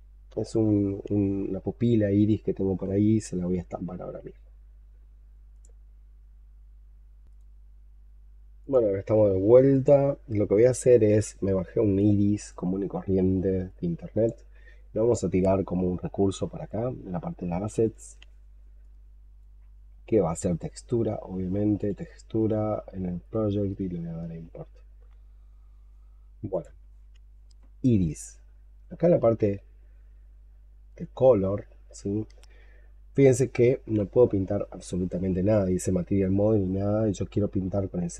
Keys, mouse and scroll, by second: 23.5 double click, 29.2-30.0 scroll up 2, 30.1 scroll up 5, 30.2-30.8 scroll down 3, 30.8-32.6 scroll up 2, 36.2-37.0 scroll up 3.